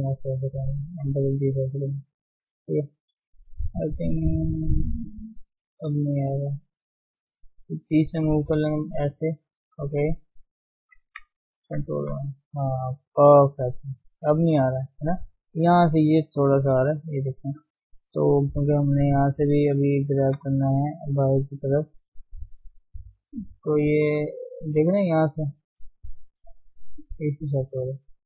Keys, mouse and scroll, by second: 0.3 click, 0.5 g, 2.0 click, 2.1 g, 2.8 scroll down 2, 2.9 middle click, 3.2 Tab, 3.5-5.4 middle drag, 5.4 Tab, 5.6 middle click, 5.9 scroll up 1, 6.1-7.3 shift+middle drag, 7.3 click, 8.2 g, 9.8 click, 10.1 g, 11.1 Tab, 11.6 ctrl+1, 12.2 middle click, 13.1 scroll down 2, 13.3-14.7 middle drag, 14.7 scroll up 1, 15.0-17.1 shift+middle drag, 17.1 d, 17.3 click, 17.8 Tab, 18.7 middle click, 18.8 scroll up 1, 19.1 shift+middle click, 19.4 shift+scroll up 1, 19.6 shift+z, 20.0 middle click, 20.5 shift+z, 21.1 click, 21.5-22.8 middle drag, 22.8 g, 26.6 g.